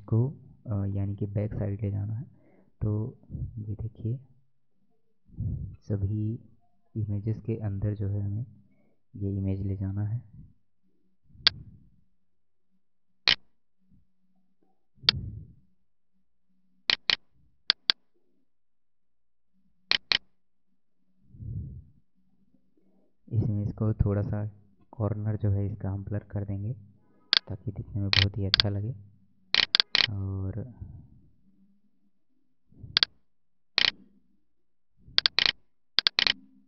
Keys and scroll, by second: 2.0 ctrl+[.